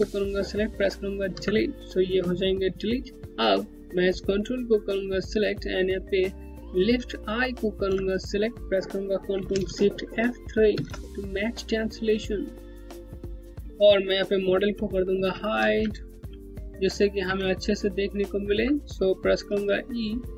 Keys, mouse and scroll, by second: 0.9 Delete, 3.2 scroll down 1, 4.2 click, 4.6-6.3 scroll down 1, 7.2 ctrl+click, 10.3 ctrl+shift+F3, 11.9 scroll down 1, 12.3 scroll up 1, 12.5 scroll down 1, 12.9 alt+click, 13.0 alt+middle click, 13.2 scroll up 1, 13.3 alt+click, 14.7 2, 15.5 alt+middle click, 15.7 Home, 16.0 scroll up 1, 16.5 middle click, 16.8 Home, 17.1 alt+click, 19.1 e.